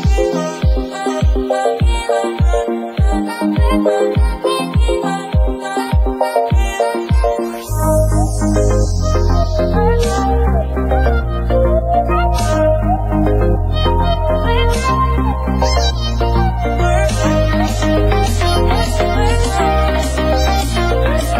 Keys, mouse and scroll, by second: 0.9 click, 1.6 middle click, 2.3-2.7 drag, 3.1 click, 3.6 KP_1, 3.9 scroll down 3, 4.1 shift+middle drag, 4.2-4.8 scroll up 5, 4.4 shift+middle click, 4.8 click, 5.2 click, 6.8-7.4 scroll down 10, 7.4 click, 8.0-8.8 scroll up 1, 8.8 click, 11.2 click, 11.7-12.5 scroll down 4, 12.5 click, 14.1 scroll down 1, 14.2 shift+middle click, 14.8 scroll up 2, 15.1 click, 15.7 scroll up 8, 16.2 scroll down 1, 16.9 click, 20.3 scroll down 2, 20.5 alt+a, 20.6 shift+middle click, 20.7-21.0 scroll up 6, 21.0 click.